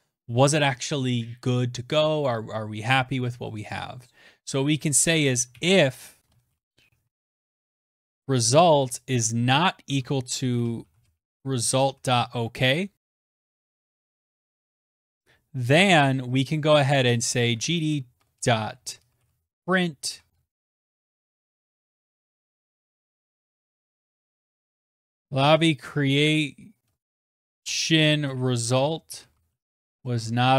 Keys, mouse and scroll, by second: 4.7-30.5 typing, 20.8 ctrl+z, 20.8 Down, 30.4 Right.